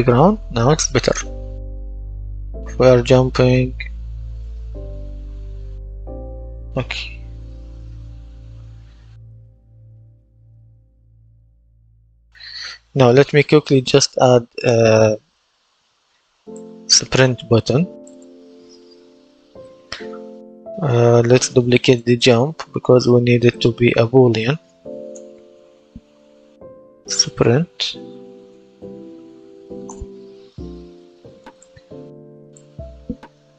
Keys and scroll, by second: 0.9 space, 2.4 space, 4.2 space, 6.3 a, 12.8 Escape, 25.0 Right, 25.3-29.1 typing, 29.7 Return.